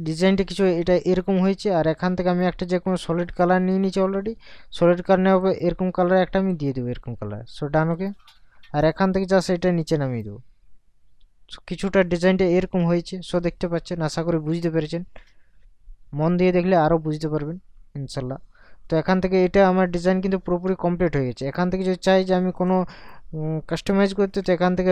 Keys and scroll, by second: 24.1 ctrl+t.